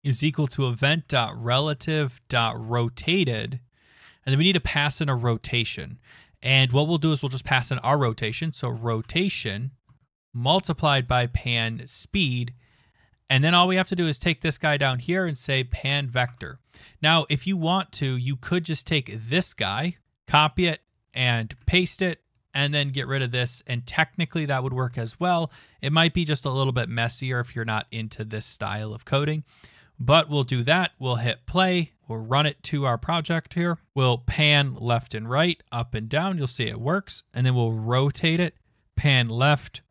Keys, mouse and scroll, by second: 0.0-3.8 typing, 8.5-12.2 typing, 14.5 click, 14.9-15.9 typing, 16.2 Tab, 20.1 ctrl+c, 21.5 click, 21.5 ctrl+v, 22.6 click, 23.0 BackSpace, 24.3 click, 24.9 ctrl+s, 30.9 click, 31.5 click.